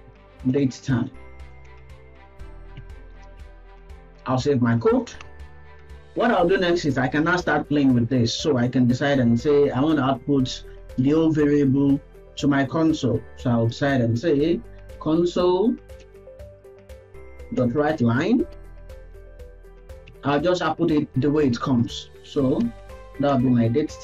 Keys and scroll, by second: 0.6 Return, 3.1 ctrl+s, 16.1 BackSpace, 17.5 Return.